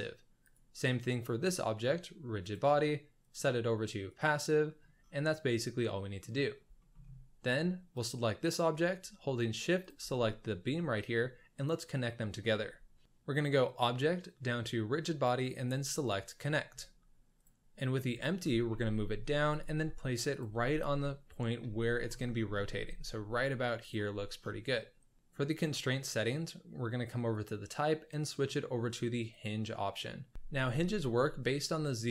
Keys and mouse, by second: 0.4 click, 2.4 drag, 3.2-4.2 drag, 5.2-6.2 middle drag, 6.7 shift+middle drag, 7.9 click, 9.8 shift+click, 13.6-16.3 drag, 17.7 middle drag, 18.2 shift+middle drag, 18.6 g, 19.6 g, 20.9 KP_1, 21.5 z, 22.7 g, 23.9 click, 24.6-25.1 middle drag, 30.3 z.